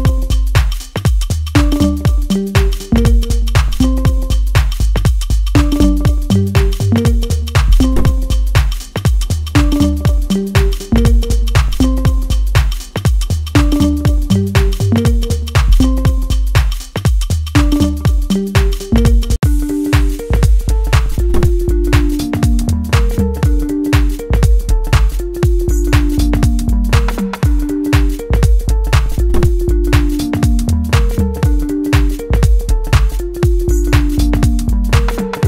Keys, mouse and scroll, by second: 0.9 click, 3.8-6.4 middle drag, 6.4 click, 8.8-13.7 drag, 13.7 middle click, 13.9-20.6 middle drag, 22.1 click, 23.1-31.7 middle drag, 31.7-34.0 middle drag, 34.0-35.4 drag.